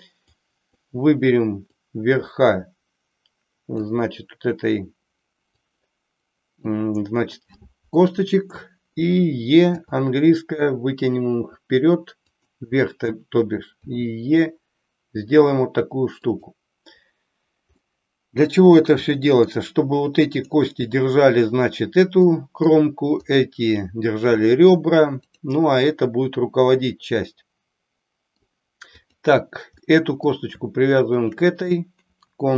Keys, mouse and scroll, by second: 0.6 click, 1.7-3.8 drag, 5.4-6.7 drag, 9.7 e, 13.8 e, 16.3 click, 17.7 middle click, 19.2 middle click, 20.4 click, 22.2 middle click, 23.3 click, 25.2 click, 27.3-28.5 middle drag, 28.9 click, 29.8 middle click, 31.2 shift+click.